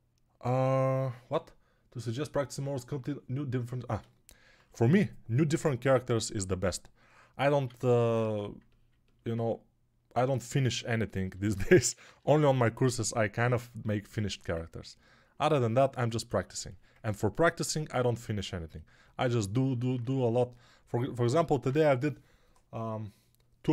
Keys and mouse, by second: 7.4 alt+q, 8.0 ctrl+Tab, 11.1-23.7 drag, 11.2 g, 11.8 [, 11.9 [, 12.0 [.